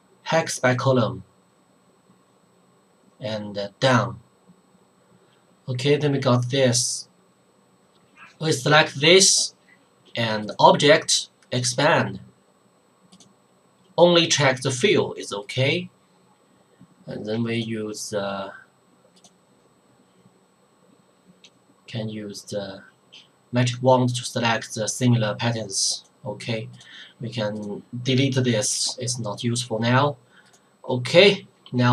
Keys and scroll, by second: 28.7 Delete.